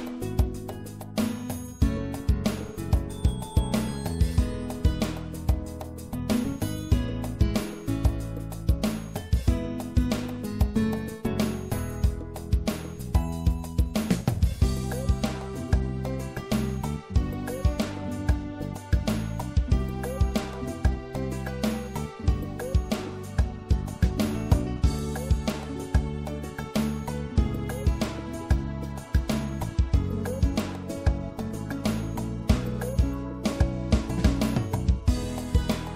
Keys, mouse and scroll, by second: 0.3-2.9 right drag, 2.9 click, 4.6 click, 5.2 right click, 5.7 middle click, 6.4 click, 9.1-10.7 middle drag, 14.5 ctrl+z, 14.9 ctrl+z, 15.2 ctrl+z, 15.6 ctrl+z, 16.0 ctrl+z, 16.4 ctrl+z, 16.8 ctrl+z, 17.2 ctrl+z, 17.8 ctrl+z, 19.5-22.4 drag, 21.7 i, 25.9 click, 26.7-29.7 right drag, 29.7 click, 32.3 click, 32.6-33.8 right drag, 33.8-35.9 middle drag.